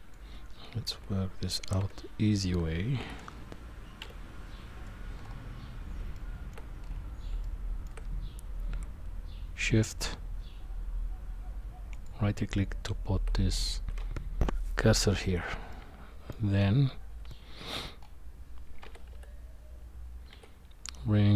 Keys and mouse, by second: 0.9 KP_1, 1.8 KP_3, 3.0 KP_1, 4.0 KP_9, 6.1-6.5 shift+middle drag, 7.4 shift+middle click, 11.9 shift+right click, 15.7-16.3 middle drag, 17.3 middle click, 18.8 g.